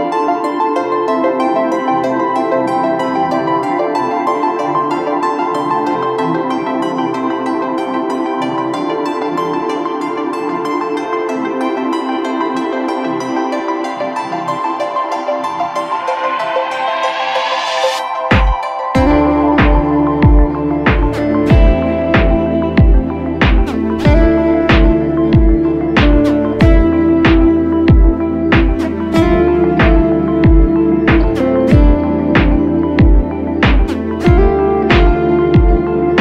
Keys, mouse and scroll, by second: 2.2 alt+shift+click, 4.8 Up, 5.0 Up, 5.4 Up, 9.0 ctrl+t, 20.0 Return, 23.3 ctrl+t, 30.6 Return, 33.5 ctrl+t.